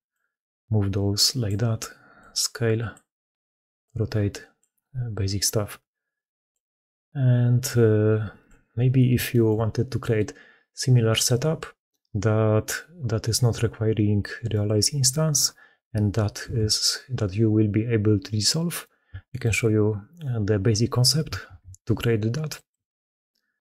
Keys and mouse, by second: 0.0-1.3 middle drag, 2.1-2.8 middle drag, 3.7-4.5 drag, 6.4-8.3 middle drag, 9.1 shift+middle click, 9.8 middle drag, 16.3 ctrl+x, 19.1 shift+middle click, 21.3 ctrl+shift+q.